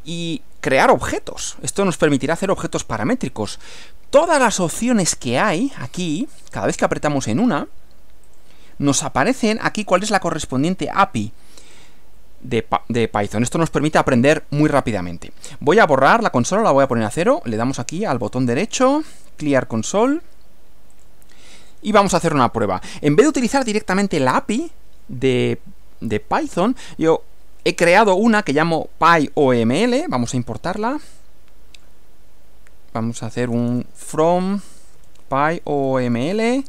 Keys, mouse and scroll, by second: 8.3 click, 11.8 click, 16.8 click, 17.8 right click, 20.1 click, 21.0 click, 33.4-36.6 typing.